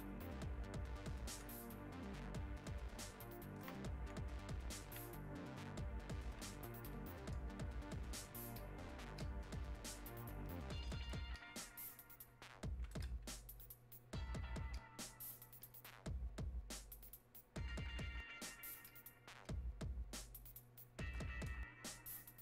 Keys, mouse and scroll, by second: 6.8-14.2 drag, 14.2-22.4 ctrl+shift+drag.